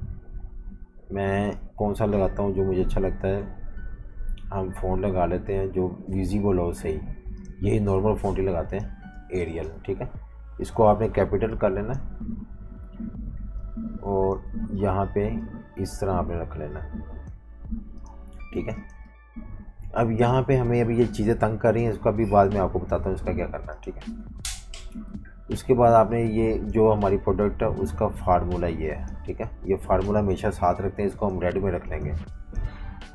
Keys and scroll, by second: 9.2 typing, 18.5 typing, 24.2 super+-, 24.3 super+-, 25.1 v, 29.4-30.3 typing.